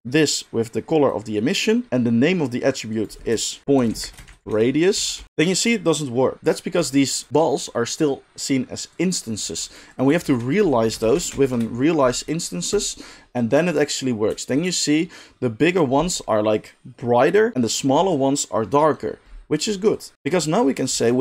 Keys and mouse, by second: 6.8 g, 7.2-8.9 middle drag, 8.9 click, 9.8 middle click, 9.9-12.8 shift+drag, 10.2 shift+a, 12.8-19.9 middle drag, 19.9-21.2 drag, 20.9 shift+a.